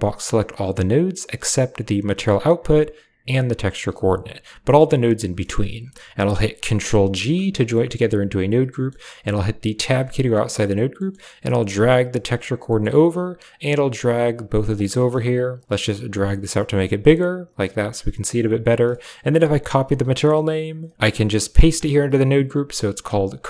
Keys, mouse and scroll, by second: 3.8 g, 7.0 ctrl+g, 7.6-7.9 middle drag, 8.6 middle click, 9.7 Tab, 10.8 middle click, 11.4 click, 11.5 click, 12.5 middle click, 13.0-13.3 drag, 13.5 g, 14.7 middle click, 15.5 click, 16.3 click, 17.4 click, 17.6 click, 18.3 click, 18.6 typing, 18.8 middle click, 19.7-20.9 drag, 21.2 ctrl+click, 22.4 click, 22.9 click.